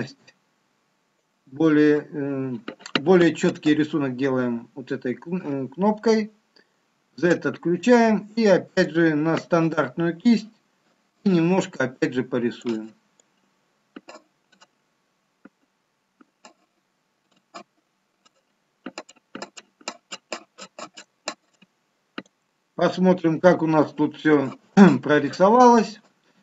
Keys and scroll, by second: 6.9 z, 23.1 shift+z.